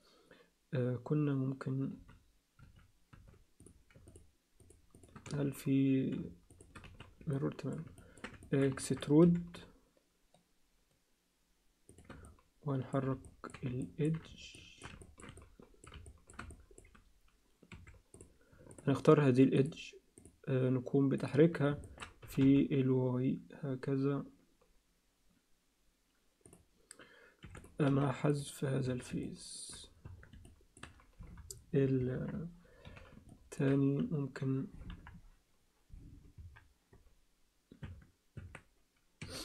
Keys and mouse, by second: 1.9 z, 2.6 z, 3.1 z, 3.6 click, 4.1 shift+click, 4.6 click, 5.0 click, 5.3 z, 6.5 click, 6.8 z, 7.3 alt+middle click, 8.0 ctrl+middle click, 8.4 alt+shift+middle click, 8.8 ctrl+alt+middle click, 9.2 e, 12.3 alt+middle click, 13.3 alt+middle click, 13.8 alt+shift+middle click, 14.5 alt+shift+middle click, 15.0 ctrl+middle click, 15.4 alt+middle click, 16.0 alt+shift+middle click, 16.5 alt+middle click, 17.7 2, 18.1 click, 19.6 click, 20.2 click, 21.2 shift+click, 21.8 ctrl+alt+click, 22.2 g, 27.4 3, 27.9 x, 28.9 Tab, 29.2 alt+middle click, 30.1 Tab, 30.4 alt+middle click, 31.4 KP_3, 32.1 ctrl+KP_1, 32.8 z, 33.3 ctrl+alt+click, 33.4 z, 34.9 KP_1, 36.4 KP_3, 37.8 Tab, 38.4 Tab, 39.2 Tab, 39.2 1.